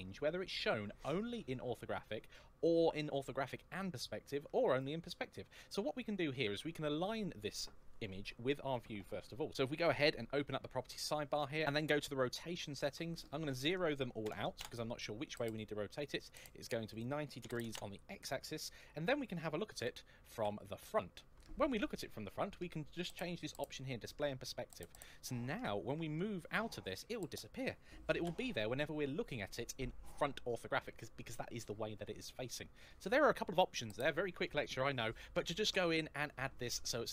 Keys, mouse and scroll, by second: 9.3 n, 11.5-11.8 scroll down 1, 13.0 click, 14.0 KP_0, 14.4 Return, 16.7 click, 17.2 KP_9, 17.4 KP_0, 17.5 Return, 19.6 KP_3, 20.2 KP_1, 24.4 click, 26.0 middle click, 28.0 KP_1.